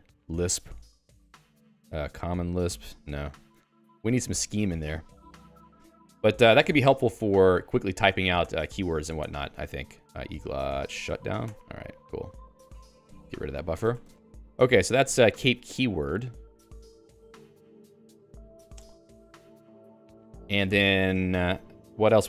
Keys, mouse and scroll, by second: 0.0-2.7 typing, 1.6 ctrl+g, 1.7 ctrl+s, 3.2 ctrl+g, 3.8 q, 5.4 click, 6.2 click, 11.4 h, 11.5 Return, 13.7 Escape, 14.2 ctrl+g, 14.4 ctrl+g, 14.6 k, 15.3 k, 15.5 k, 21.6-22.2 typing.